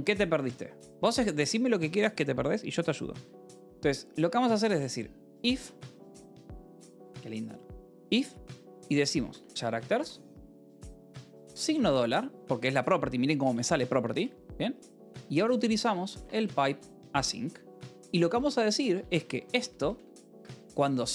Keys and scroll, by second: 0.8 j, 1.3 a, 5.2 #, 5.3 BackSpace, 5.9 i, 6.1 space, 8.3-12.2 typing, 14.8 Return, 15.2-20.8 typing, 20.2 Escape.